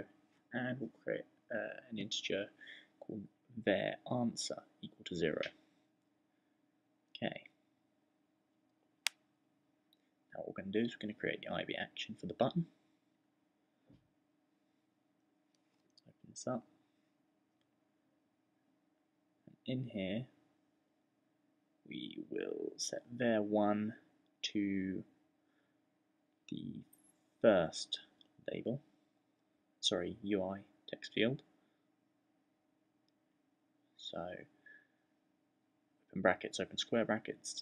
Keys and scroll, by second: 0.0-5.6 typing, 9.8-12.6 typing, 13.6-15.4 typing, 16.7 shift+}, 21.5-23.1 typing, 27.5 =, 33.5 shift+9, 34.4 [, 35.6-37.6 typing.